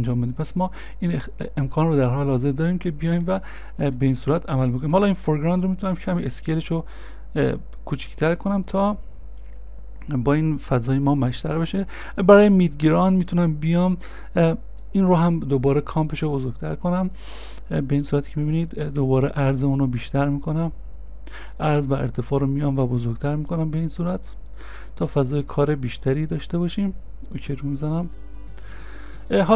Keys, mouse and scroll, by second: 3.9 ctrl+z, 5.2 s, 14.3 s, 14.3 middle click, 15.1-16.2 scroll down 1, 29.4-29.5 scroll down 1.